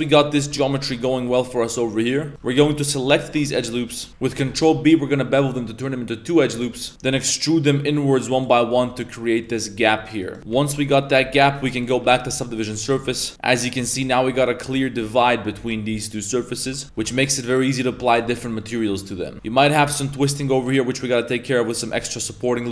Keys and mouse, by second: 0.4 z, 0.7 alt+shift+right click, 1.0 z, 1.5 middle click, 2.2 z, 2.7 middle click, 3.2 alt+shift+right click, 3.5 middle click, 3.9 shift+middle click, 4.1 ctrl+z, 4.2 ctrl+b, 6.7 shift+middle click, 6.9 3, 7.0 e, 8.6 middle click, 8.8 z, 8.9 middle click, 9.6 middle click, 10.2 right click, 17.1 middle click, 17.1 a, 17.5 right click, 18.0 middle click, 18.2 Tab, 18.6 middle click, 19.0 middle click, 19.3 Tab, 19.6 middle click, 20.2 ctrl+Tab, 20.4 ctrl+r, 22.1 middle click.